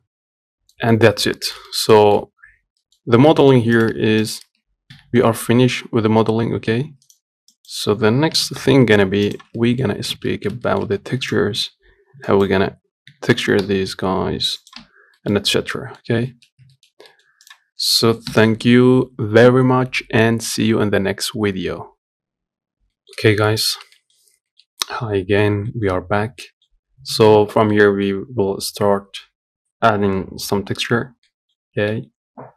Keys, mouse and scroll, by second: 0.4-0.8 scroll down 3, 0.8 middle click, 1.5 scroll up 1, 1.7-3.3 shift+middle drag, 3.3 scroll up 1, 3.6 shift+middle click, 4.1 click, 4.2 Tab, 4.5 click, 5.2 g, 7.8 click, 8.6 g, 9.9 middle click, 10.4 ctrl+z, 10.7 scroll up 1, 10.9 shift+middle click, 11.6 click, 13.4 g, 15.1 Tab, 15.2 scroll down 1, 15.4 middle click, 15.7-16.0 scroll up 1, 16.0 middle click, 16.3-16.6 scroll down 1, 16.6 shift+middle click, 16.8 scroll up 1, 17.0 shift+middle click, 17.7 click, 18.6 n, 22.6-23.9 middle drag, 23.9 scroll up 1, 24.2-25.9 shift+middle drag, 25.9 scroll down 1, 26.1 middle click, 26.6 scroll up 1, 26.8 shift+middle click, 27.2 scroll down 1, 27.4-31.3 middle drag, 31.3-32.5 scroll up 1.